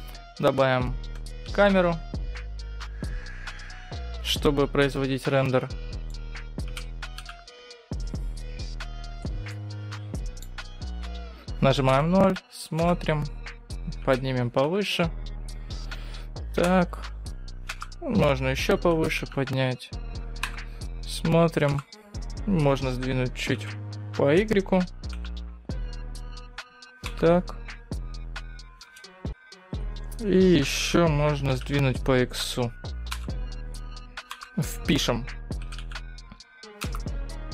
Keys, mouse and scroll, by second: 0.0-0.6 scroll down 2, 1.5 shift+a, 4.2-4.7 scroll down 4, 4.7-5.0 scroll up 5, 5.0 middle click, 6.8 g, 9.6 middle click, 10.4-11.1 scroll down 5, 10.9-11.6 scroll up 3, 11.8 KP_0, 12.8 KP_0, 14.3 g, 16.8 KP_0, 17.8 KP_0, 19.0 g, 20.6 KP_0, 21.8 KP_0, 23.7 g, 27.1 KP_0, 29.0 KP_0, 31.0 g, 33.3 KP_0, 34.5 KP_0, 35.7 g, 36.8 KP_0.